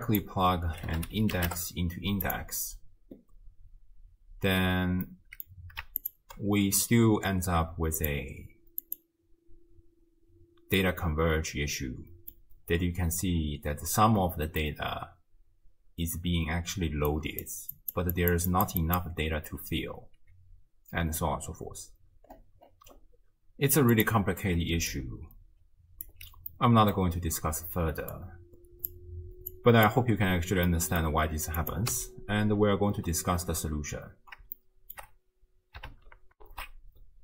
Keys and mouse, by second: 5.1 middle click, 8.0-10.0 drag, 10.8-12.3 drag, 13.2-14.7 drag, 14.9-19.5 d, 17.1 click, 18.2 click, 18.6 click, 19.9 d, 24.0 click, 24.6 d, 24.9-26.1 drag, 26.1 d, 26.6 click, 26.6 d, 28.1 click, 29.5 click, 30.7-31.0 drag, 31.6 click, 31.9 x, 34.6-34.9 shift+drag, 36.4 ctrl+alt+shift+q.